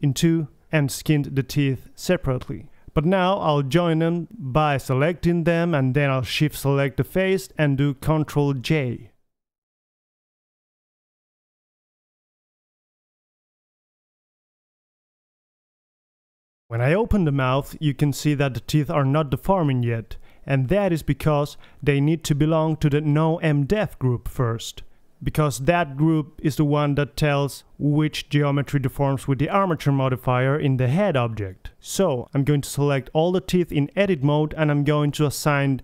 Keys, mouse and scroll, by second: 3.7-6.5 middle drag, 6.5-7.0 drag, 7.0-8.3 right drag, 8.3-9.5 middle drag, 9.5 ctrl+j, 11.2 a, 11.6-13.3 drag, 12.2 g, 13.4 z, 14.0-15.4 middle drag, 15.4-17.1 drag, 16.3 g, 17.1 middle click, 19.3-21.0 middle drag, 21.3-23.3 middle drag, 25.4 KP_3, 25.8-28.3 middle drag, 28.9 right click, 29.3 Tab, 30.9 ctrl+l, 32.1 h, 32.9 middle click, 33.1-34.7 drag, 33.4 z, 33.8 c, 35.6 ctrl+l.